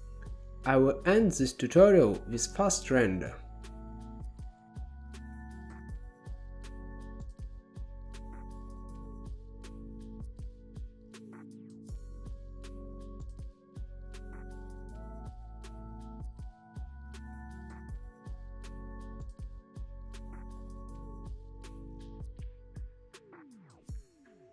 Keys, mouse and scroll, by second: 0.2-1.6 middle drag, 1.6 click, 2.8 ctrl+b, 3.3-3.7 scroll down 5, 4.9 ctrl+b, 6.9-7.2 drag, 9.5-10.5 drag, 12.4 click, 14.5 click, 15.0 click, 15.3 click, 20.1 click, 20.7 scroll up 2, 21.6-21.9 drag, 21.9-22.6 scroll down 8, 22.6-23.7 drag, 23.9-24.5 scroll up 5.